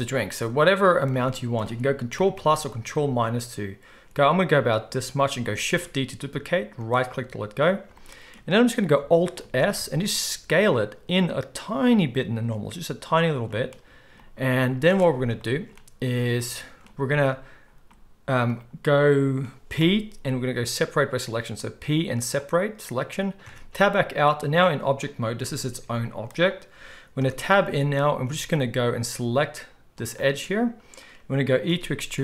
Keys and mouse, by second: 5.7 shift+d, 9.4 alt+s, 14.6 z, 19.7 p, 23.4 Tab, 25.4 g, 26.6-27.8 middle drag, 27.2 Tab, 27.9 middle click, 28.3 alt+a, 28.3 alt+middle click, 28.9-29.2 shift+middle drag, 30.0 alt+shift+click, 30.3-32.2 alt+shift+middle drag, 31.7 e.